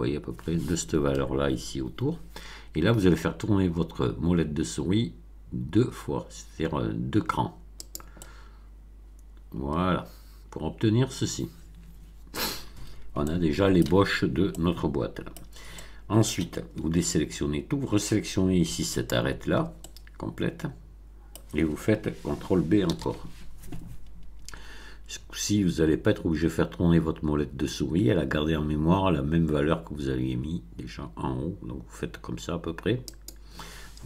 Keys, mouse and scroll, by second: 3.6 scroll up 1, 5.7 scroll up 1, 7.8 click, 8.1-12.4 middle drag, 13.2 shift+middle click, 14.5-15.5 middle drag, 15.7 middle click, 16.8 a, 18.9 alt+click, 19.7-21.5 alt+middle drag, 22.8 ctrl+b, 33.1 click.